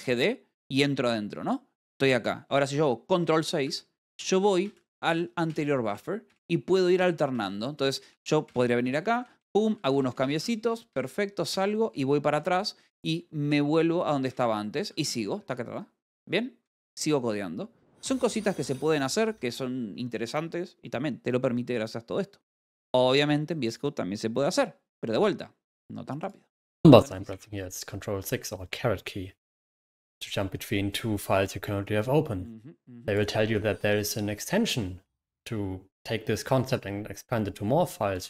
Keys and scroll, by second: 0.1-1.0 typing, 4.1 ctrl+6, 9.4-10.7 typing, 13.8 s, 14.0 d, 14.7 Escape, 15.1-16.4 typing, 17.6-19.4 typing, 19.5 ctrl+6, 20.5 Escape.